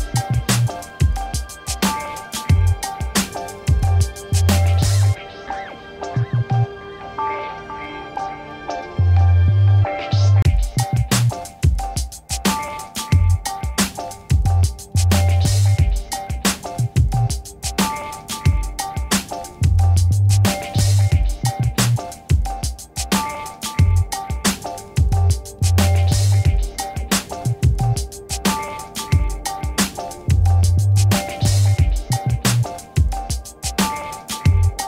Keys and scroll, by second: 5.8 5, 6.1 Return, 6.9 ctrl+t, 11.9 Return, 13.4 ctrl+j, 13.8 ctrl+t, 17.6 Return, 19.0 ctrl+alt+shift+t, 21.2 ctrl+alt+shift+t, 28.0 w, 29.0 Return, 33.9 b.